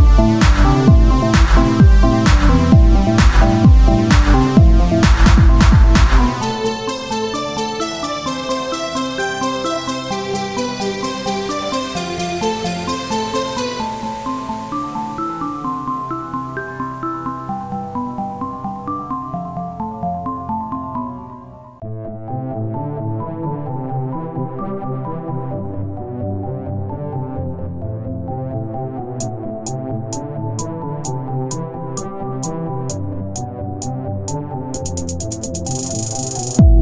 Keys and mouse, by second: 0.1 Tab, 1.1-2.3 right drag, 4.2 o, 4.7 s, 7.1-9.1 drag, 9.1 ctrl+z, 9.8-11.3 drag, 10.9 s, 13.1-14.3 drag, 14.3 middle click, 14.5 Tab, 18.7 middle click, 23.7 t.